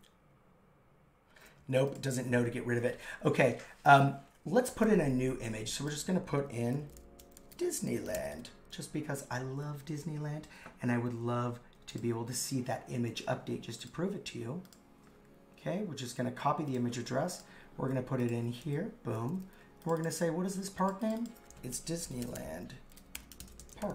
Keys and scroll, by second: 6.5 super+t, 18.7 super+v, 21.8 shift+d, 23.7 shift+p.